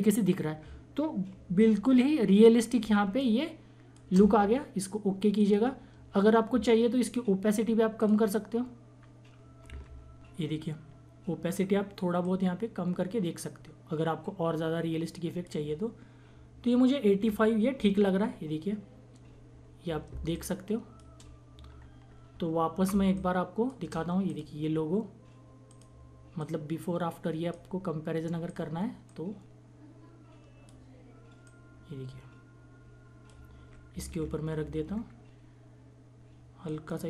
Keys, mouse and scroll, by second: 1.4 click, 1.6 ctrl+-, 2.8 space, 3.2 click, 3.2 space, 5.4 click, 8.0 click, 9.8 ctrl+-, 10.3 =, 12.2-18.0 drag, 18.1 ctrl+-, 19.2 ctrl+=, 20.1 space, 20.3 click, 20.6 space, 21.8 ctrl+-, 22.9 space, 23.1 click, 23.2 click, 23.3 space, 24.2-33.9 drag, 33.9 Down, 36.6 click.